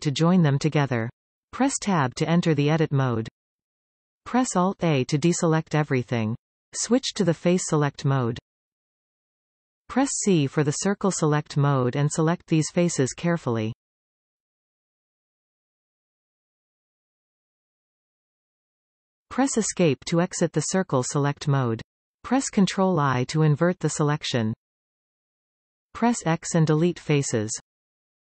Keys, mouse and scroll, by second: 0.6 Tab, 1.3-2.0 scroll up 1, 3.5 alt+a, 4.3-7.1 middle drag, 7.1 click, 9.0 c, 20.2 Escape, 23.2 ctrl+i, 25.6 x.